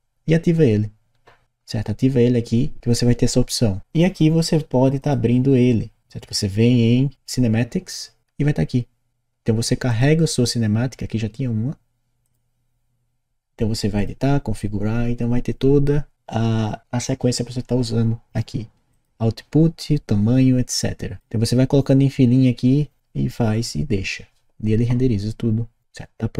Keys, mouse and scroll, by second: 4.9 click, 9.8 click, 10.6-12.3 drag, 18.9 click, 26.3 click.